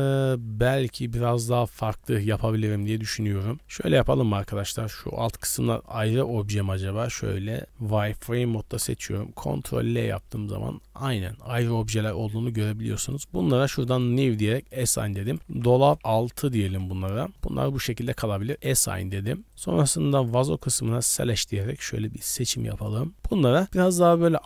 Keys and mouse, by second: 2.7 click, 3.4 middle click, 3.8 KP_1, 5.2 shift+middle click, 5.5 click, 5.6 3, 6.1 z, 6.6 b, 8.7 ctrl+l, 10.1 middle click, 10.4 z, 10.7 middle click, 12.0 middle click, 13.1 click, 13.9 drag, 14.6 click, 15.3-17.3 drag, 18.5 click, 19.1 click, 19.5-20.9 drag, 22.6 click, 23.3 middle click.